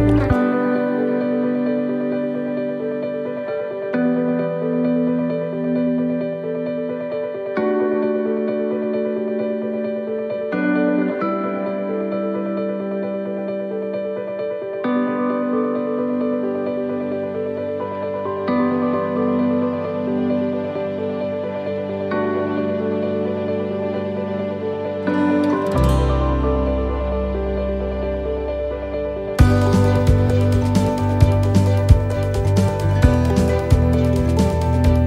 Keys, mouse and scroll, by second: 2.6 click, 6.2 right click, 6.6 l, 7.6 click, 9.6 click, 11.8 right click, 12.2 l, 12.9 click, 15.0 click, 17.7 click, 18.8 right click, 19.1 l, 19.8 click, 22.6 click, 24.9 click, 27.3 right click, 27.6 l, 29.2 click, 32.1 click, 34.2 right click, 34.5 l.